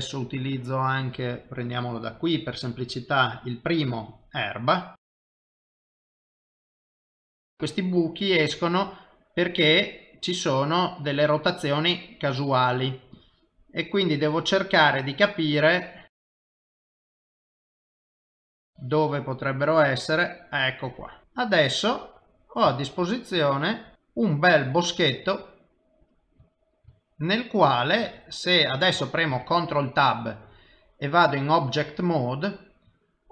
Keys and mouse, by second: 2.0 click, 5.2 click, 5.9 click, 7.0 click, 7.2 click, 8.7 click, 9.9 click, 13.2 click, 14.4 click, 16.2 click, 16.6 click, 17.4 click, 18.1 click, 21.2 middle click, 23.2 shift+middle click, 23.9 ctrl+middle click, 25.6 middle click, 29.8 ctrl+Tab.